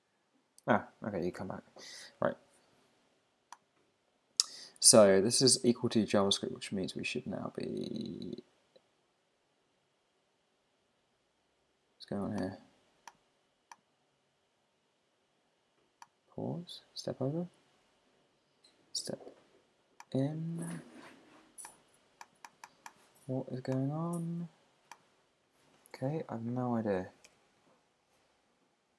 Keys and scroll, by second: 26.1 super+`.